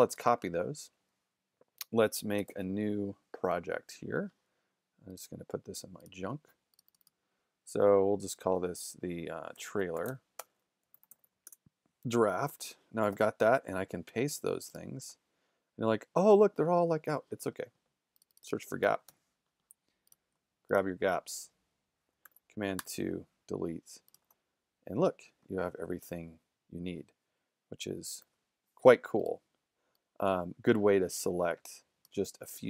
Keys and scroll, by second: 0.1 super+c, 2.5 super+n, 9.3-11.7 typing, 13.1 super+v, 16.0 shift+z, 18.6-19.6 typing, 22.3 super+2, 22.8 super+BackSpace, 23.4 BackSpace, 28.2 super+-.